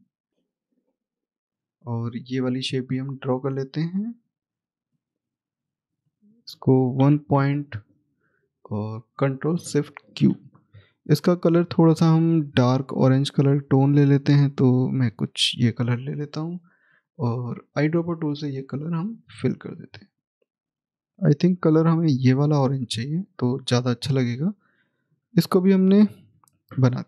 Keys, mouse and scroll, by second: 0.6 alt+click, 5.9 Escape, 6.8 click, 9.1 click, 11.9 click, 19.9 double click, 20.6 right click, 22.0 click, 22.8-23.5 scroll down 1, 23.5 scroll down 1, 23.5 click.